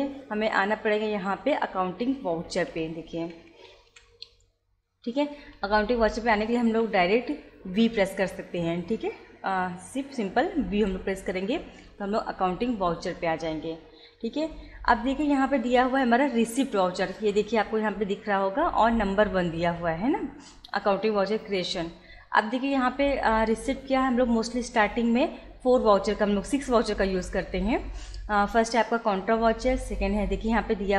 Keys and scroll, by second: 2.5 Up, 5.3 Down, 10.7 v.